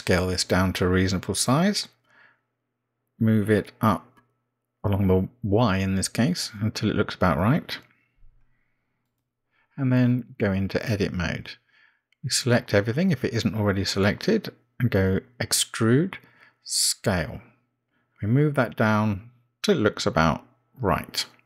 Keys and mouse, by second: 2.6 s, 5.7 g, 12.3 Tab, 16.1 e.